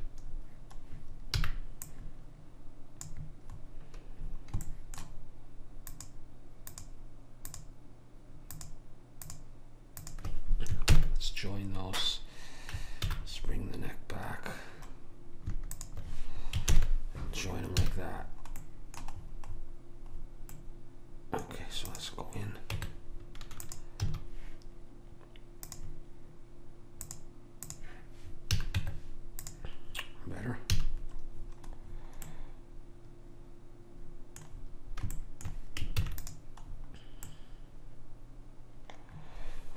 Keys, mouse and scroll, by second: 0.3-3.0 middle drag, 1.5 b, 4.6-6.0 middle drag, 6.0-11.9 drag, 6.0 right click, 11.0 ctrl+j, 13.1 alt+h, 15.8 click, 16.7 ctrl+j, 17.9 a, 21.9 click, 22.8 Tab, 24.1 a, 28.6 a, 28.8 Tab, 30.8 a, 35.2 middle click, 36.0 ctrl+s.